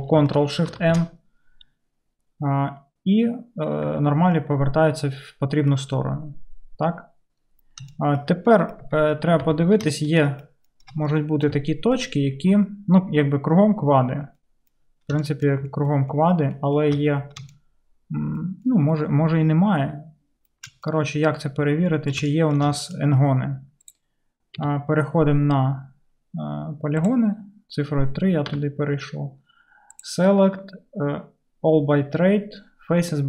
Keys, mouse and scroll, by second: 0.7 ctrl+shift+n, 3.9 Tab, 8.9 Tab, 9.5 Tab, 9.5 1, 24.0-27.4 middle drag, 24.6 3, 27.1-33.2 drag, 28.5 3.